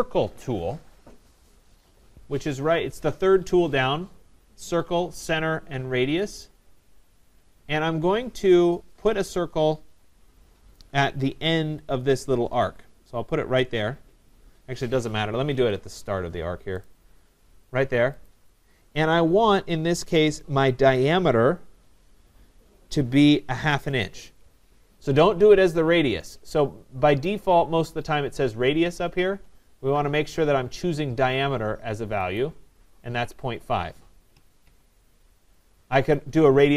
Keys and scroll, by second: 15.5 Escape.